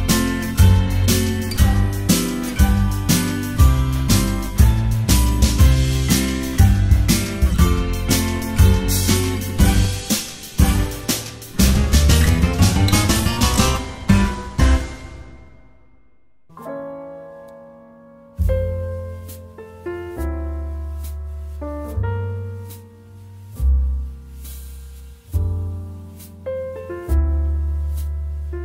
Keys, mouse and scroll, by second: 1.6-4.6 typing, 5.2 ctrl+s, 6.8 ctrl+z, 8.1 ctrl+z, 10.1 space, 11.0 space, 11.3 space, 12.0 space, 14.4 space, 14.8 ctrl+z, 15.8-20.2 typing, 23.0 space, 23.6 space, 25.3-28.6 typing.